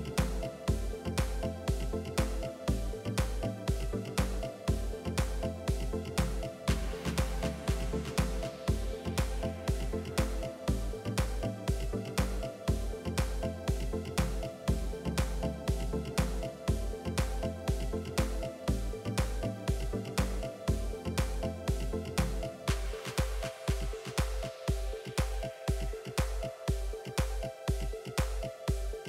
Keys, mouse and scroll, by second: 0.3 click, 1.0-2.1 drag, 2.1 ctrl+r, 4.2 click, 5.0 click, 6.3 click, 7.1-8.3 drag, 9.8 e, 12.5-14.5 middle drag, 14.5 click, 14.7 middle click, 15.4 click, 16.4 Delete, 16.6 middle click, 17.1 KP_3, 17.3 KP_1, 18.2-21.4 drag, 27.2 Tab, 27.6 ctrl+r.